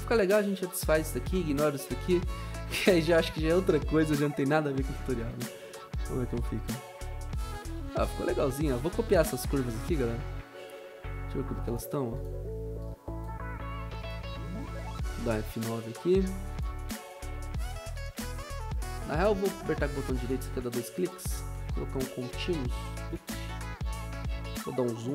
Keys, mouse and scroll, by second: 1.2 ctrl+c, 2.3 ctrl+v, 4.6 F9, 15.6 F9.